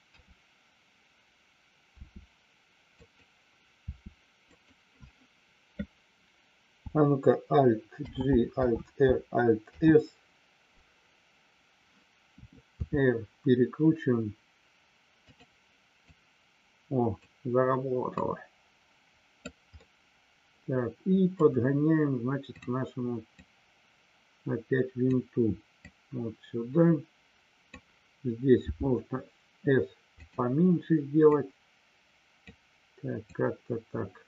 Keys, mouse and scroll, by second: 2.0 r, 2.9 click, 4.5 click, 8.0 alt+g, 16.0-17.1 drag, 18.1-19.4 drag, 19.7-21.4 middle drag, 22.5 click, 23.5-25.0 drag, 25.9-27.8 drag, 30.1 click, 31.3-32.4 drag, 33.4-34.2 drag.